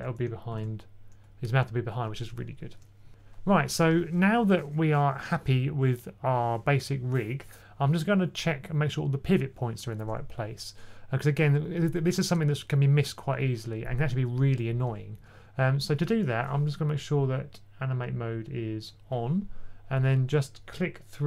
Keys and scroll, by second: 0.4 super+z, 2.9 2, 15.1 2, 15.2 2.